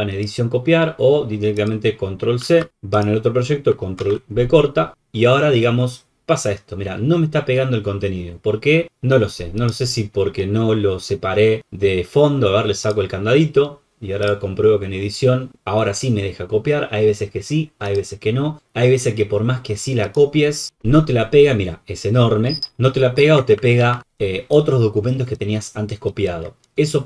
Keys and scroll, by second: 2.6 ctrl+c, 4.0 ctrl+v, 20.6 ctrl+v, 23.8 ctrl+alt+t.